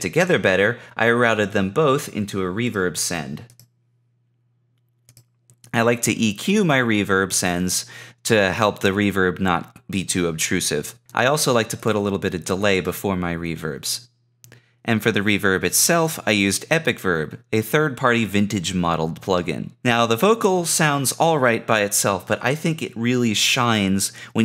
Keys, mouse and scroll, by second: 17.4 click, 17.6 click.